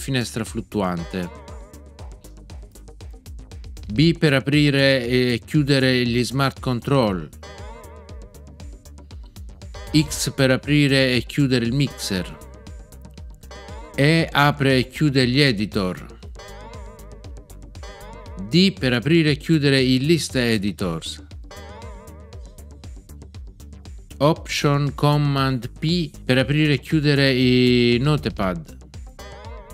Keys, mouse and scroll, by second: 0.9 alt+shift+r, 7.4 b, 11.8 x, 16.3 e, 21.4 d, 29.1 alt+super+p.